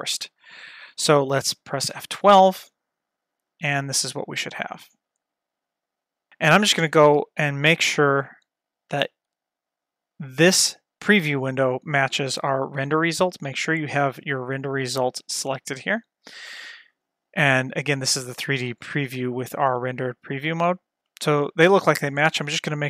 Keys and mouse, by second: 0.1 click, 2.7 F12, 5.2-6.3 drag, 7.7 F12, 14.7 click, 22.2 click.